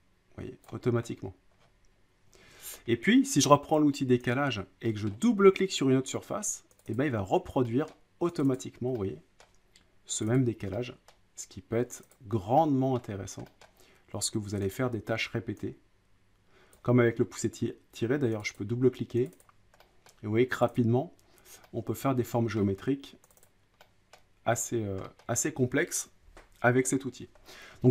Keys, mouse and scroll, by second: 0.7 click, 1.0-1.6 scroll up 6, 1.6 scroll down 3, 1.7 middle click, 2.3 scroll, 2.5 ctrl+z, 2.5-3.3 scroll down 7, 4.3 click, 5.1 middle click, 6.8 click, 6.9 click, 7.9 middle click, 8.4 click, 8.5 click, 9.4 middle click, 10.2 click, 10.3 click, 11.1 middle click, 12.0 click, 12.1 click, 13.0 middle click, 13.6 middle click, 14.7 click, 16.7 click, 18.4 click, 18.6 click, 19.3 click, 19.4 click, 20.1 middle click, 20.6 click, 20.8 click, 22.6 middle click, 23.3 click, 23.4 click, 24.1 middle click, 24.6 middle click, 24.7 middle click, 25.2 middle click, 27.4-27.9 scroll down 8.